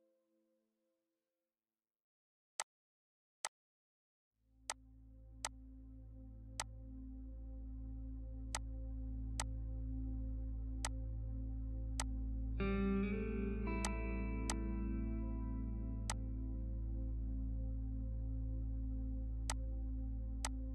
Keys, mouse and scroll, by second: 19.5-20.7 drag.